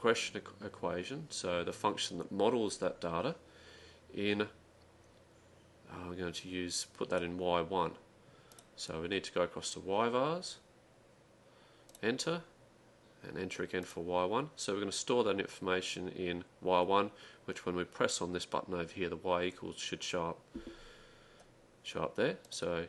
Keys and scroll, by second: 13.7-14.4 typing.